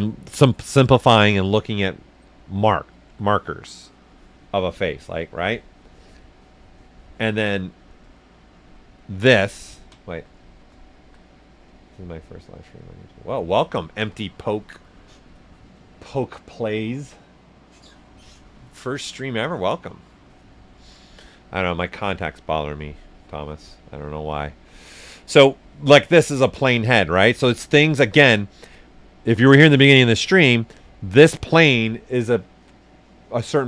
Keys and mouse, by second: 9.5 ctrl+right click, 10.3 right click, 23.4 right click, 25.8 right click, 27.0 s, 27.1 click, 28.0 right click.